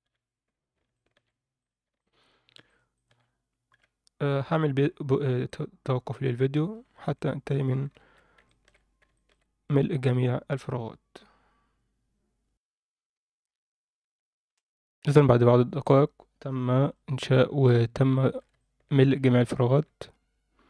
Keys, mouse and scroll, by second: 0.0 f, 0.9 alt+shift+middle click, 1.6 click, 2.0 shift+click, 2.7 shift+click, 2.9 shift+click, 3.7 f, 6.6-7.0 scroll down 2, 7.0 click, 8.0 ctrl+z, 8.5 alt+shift+middle click, 8.8 scroll down 1, 9.1 shift+middle click, 12.4 F9, 12.5 shift+middle click, 13.1 scroll down 2, 13.4-14.7 scroll up 2, 15.8 click, 15.8 scroll up 2, 16.6 Tab, 16.8 click, 17.5 Tab, 18.1 alt+shift+middle click, 18.5 ctrl+middle drag, 19.7 Tab.